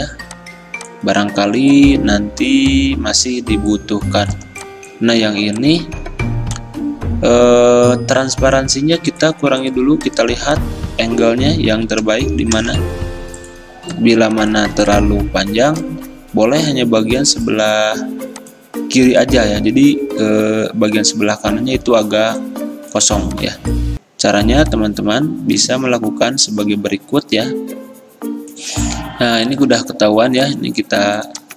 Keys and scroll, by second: 12.7 v.